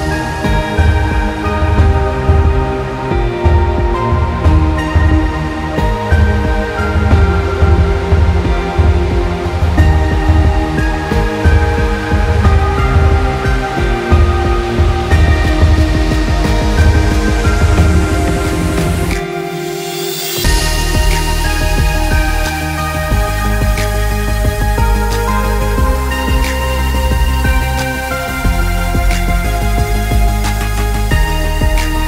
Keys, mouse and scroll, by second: 0.8 click, 2.5-3.3 scroll down 1, 3.3 click, 4.8-5.7 scroll down 1, 5.7 click, 12.9 click, 13.7 scroll down 1, 14.9 click, 27.8 click.